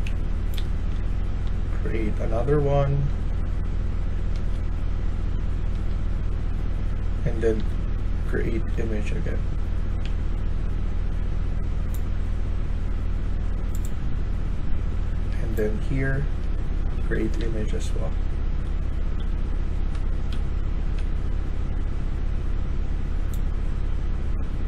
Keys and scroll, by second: 0.1-1.2 typing, 4.0-4.8 typing, 7.2-8.5 typing, 9.9 a, 14.9-16.4 d, 16.9 w, 17.3 d, 18.5 e, 19.1 d, 20.1-21.2 typing.